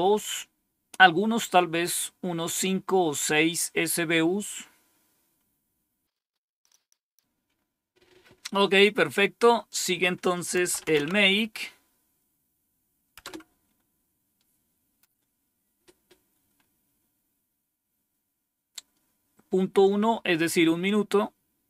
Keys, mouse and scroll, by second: 6.1-9.1 scroll down 1, 9.1-9.6 scroll down 1, 9.6 click, 10.3-11.4 typing, 13.1 Return, 21.0-21.3 scroll down 1.